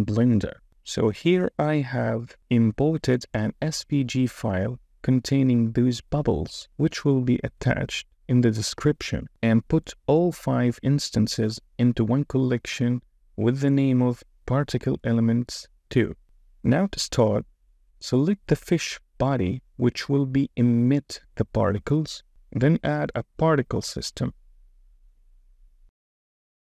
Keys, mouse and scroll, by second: 0.0 super+s, 11.1 click, 12.4 click, 13.4 click, 20.5 click, 24.3 click, 25.7 space.